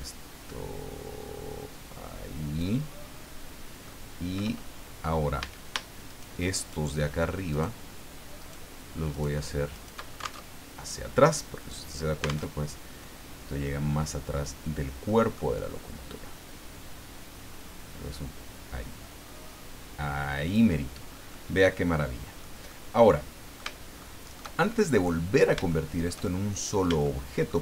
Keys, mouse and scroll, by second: 3.1 scroll down 2, 3.9 middle click, 5.0 scroll up 2, 5.4 a, 6.1 shift+right click, 6.6 shift+right click, 7.5 shift+right click, 8.4 shift+right click, 9.1 shift+right click, 9.7 shift+right click, 10.4 alt+shift+Tab, 12.5 alt+Tab, 13.0 middle click, 15.0 middle click, 16.1-17.6 drag, 17.6-18.0 scroll up 2, 18.8-19.1 scroll up 2, 21.3-22.5 middle drag, 22.6-23.8 drag, 24.0 shift+middle click, 24.9 middle click, 25.3 scroll up 2, 25.7 shift+middle click, 26.3-26.8 shift+scroll up 3, 27.0 shift+middle click.